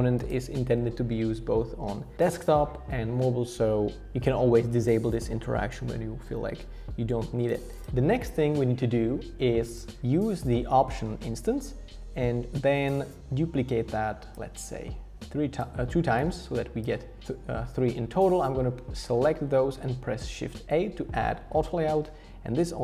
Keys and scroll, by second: 17.2 shift+a, 21.6 super+r.